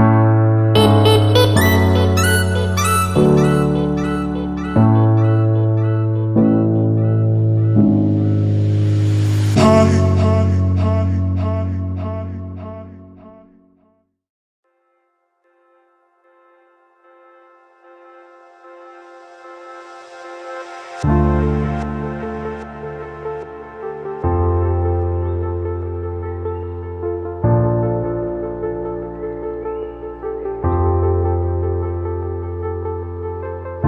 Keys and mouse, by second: 2.5 shift+drag, 2.7-3.9 shift+middle drag, 4.9 shift+middle click, 5.7 click, 7.3 shift+d, 8.5 click, 9.0 click, 11.0-18.0 drag, 18.0-20.5 middle drag, 20.5-24.8 drag, 27.3-33.8 drag.